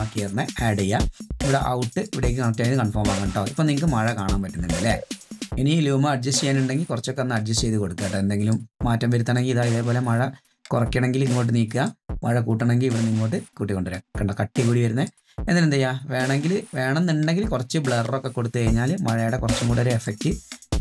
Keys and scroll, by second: 0.0 Return.